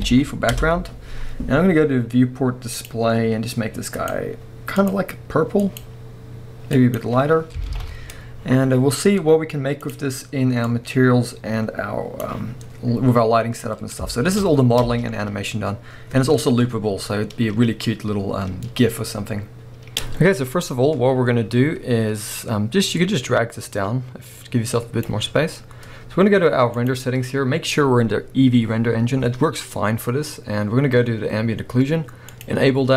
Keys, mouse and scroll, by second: 0.6 Return, 1.4-2.7 scroll down 1, 7.3-7.7 scroll up 1, 7.7 alt+a, 9.9-13.1 drag, 13.1-14.1 scroll up 1, 14.1-19.9 shift+middle drag, 14.8 space, 14.9 space, 19.0-19.9 scroll up 1, 19.9-26.9 drag, 20.5-22.2 scroll down 1, 25.3 scroll down 1, 32.4 click.